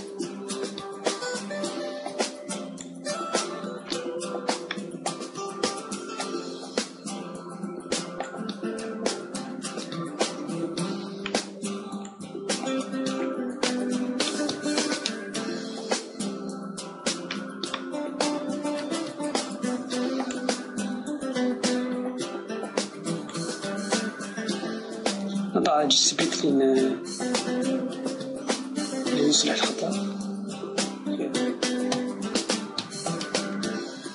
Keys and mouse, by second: 0.6 s, 3.2-6.3 drag, 5.3 KP_3, 6.9 KP_1, 8.4-10.7 drag, 10.7 shift+d, 13.3 click, 14.7 z, 15.7 Tab, 16.1-17.4 middle drag, 20.4-22.3 drag, 22.3-23.3 middle drag, 23.3-25.3 drag.